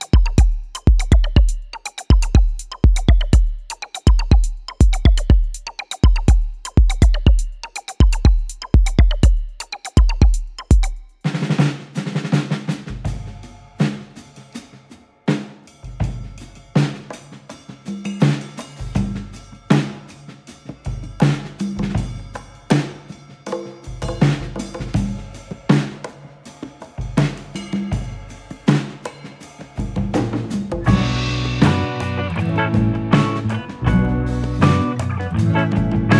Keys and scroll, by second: 1.4 ctrl+[, 4.5 ctrl+], 29.7 ctrl+-, 30.2 ctrl+=.